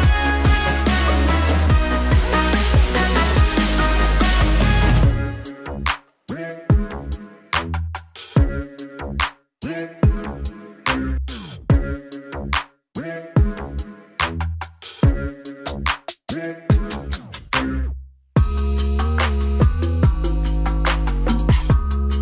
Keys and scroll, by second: 9.0 space, 12.6 alt+space, 13.3 space, 22.0 ctrl+shift+g.